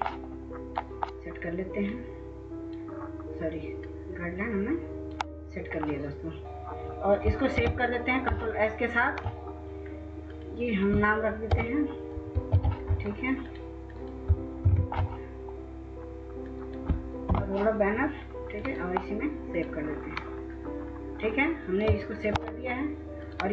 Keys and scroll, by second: 6.4 Delete, 7.6 ctrl+s, 11.4 F2, 12.4 ctrl+c, 14.6 ctrl+v, 17.2 Delete.